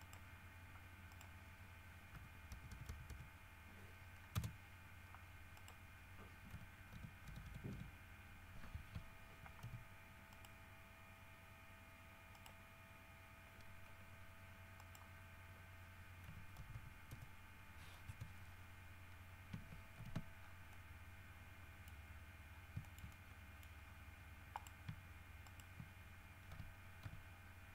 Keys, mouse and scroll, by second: 0.2 right click, 1.3 right click, 2.3 g, 2.7 Right, 4.5 Return, 5.8 right click, 6.7 g, 7.1 Left, 8.9 Escape, 9.8 g, 10.5 right click, 12.5 right click, 15.0 right click, 16.4 g, 16.8 Right, 18.2 Return, 20.2 alt+h, 20.6 alt+scroll down 2, 20.9-22.2 middle drag, 22.2 scroll up 1, 22.7 scroll down 1, 23.0 shift+middle click, 24.0 scroll up 2, 24.7 right click, 25.6 shift+right click, 26.7 w, 27.2 s.